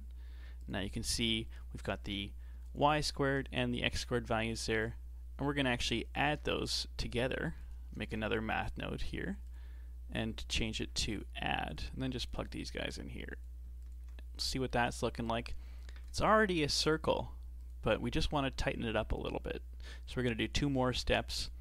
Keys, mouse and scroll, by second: 0.7 ctrl+shift+click, 2.7 ctrl+shift+click, 4.4 ctrl+shift+click, 6.3 shift+a, 7.1 click, 7.6 click, 8.0 shift+d, 10.4-11.8 drag, 12.9 click, 13.9 ctrl+shift+click, 14.5 shift+middle click, 15.3 click, 16.5 g, 18.6 click, 21.0 shift+d.